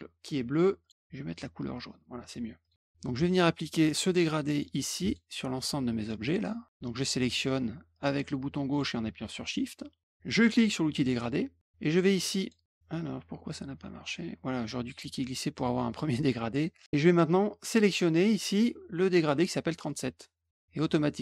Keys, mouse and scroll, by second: 0.7 click, 1.2 click, 2.6 click, 3.0 click, 4.5 click, 5.0 shift+click, 5.5 shift+click, 6.2 shift+click, 7.1 shift+click, 7.9 shift+click, 8.6 shift+click, 10.8 click, 12.3 click, 13.5-15.2 drag, 17.0 click, 19.8 click.